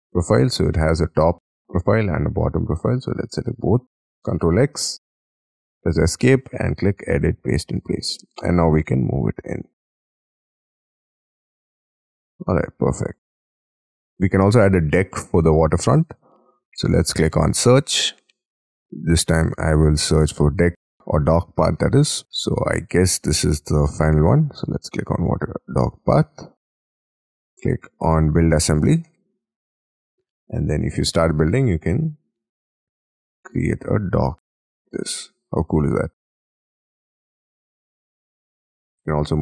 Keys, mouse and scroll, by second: 0.1-1.4 scroll up 4, 1.5 scroll up 5, 3.1 ctrl+click, 4.1 ctrl+x, 4.5 Escape, 4.8 Escape, 5.0 Escape, 5.3 Escape, 5.5 Escape, 8.0 middle click, 8.2 scroll down 2, 8.5 m, 11.4 shift+click, 11.5 space, 11.6-11.9 scroll down 8, 11.9 middle click, 12.2 middle click, 12.6 scroll down 3, 12.9 middle click, 13.3 middle click, 13.7 middle click, 28.8-29.2 scroll up 5, 29.2 middle click, 30.0-30.3 scroll up 1, 34.5 space, 34.9 middle click, 35.5 scroll up 3, 35.8 middle click, 38.6-39.4 scroll up 14.